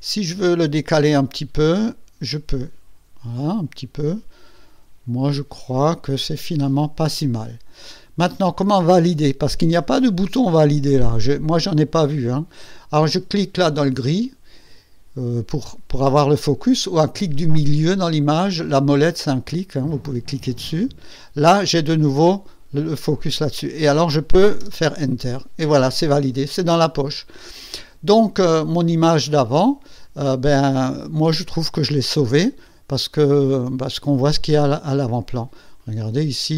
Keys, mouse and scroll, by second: 1.7-6.6 drag, 13.5 click, 17.7 middle click, 20.8 middle click, 24.5 Return, 31.9 Tab, 32.6 ctrl+scroll up 2, 33.2 ctrl+scroll down 2, 35.7 click.